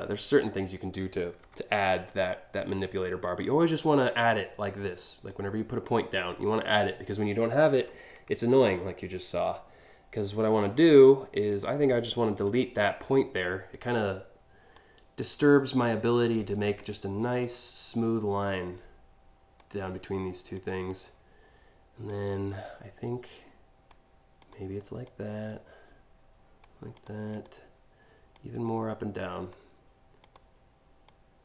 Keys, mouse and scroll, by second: 1.0 p, 2.9-4.9 drag, 8.2-10.1 drag, 11.2 right click, 12.0 click, 14.4-16.3 drag, 17.0-19.2 drag, 20.2 click, 21.7-23.5 drag, 24.0 click, 24.7-26.3 drag, 26.6 click, 27.0 click, 28.0-29.1 drag, 29.9 click, 30.7-31.4 drag.